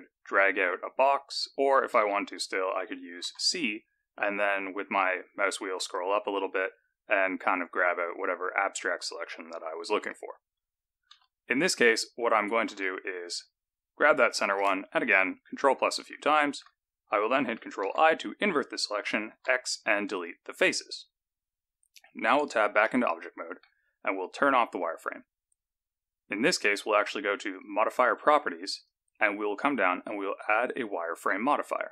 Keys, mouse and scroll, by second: 0.2 click, 1.9 alt+a, 3.2 c, 12.6 alt+a, 14.0 click, 14.9-16.0 ctrl+KP_Add, 16.4 ctrl+KP_Add, 17.8 ctrl+i, 19.2 x, 22.2 Tab, 22.8 middle click, 24.6 click, 27.5 click, 28.7 click, 31.8-31.9 scroll up 3.